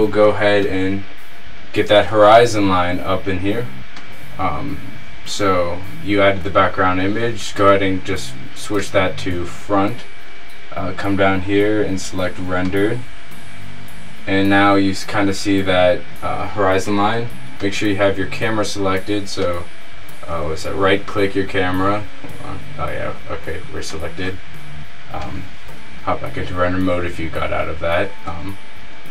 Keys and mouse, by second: 2.1 KP_0, 10.6 middle click, 13.1-17.1 middle drag, 17.7-23.1 drag, 21.9 z, 23.1 middle click, 24.1-25.2 drag, 25.4 click, 25.8 click, 26.2 middle click.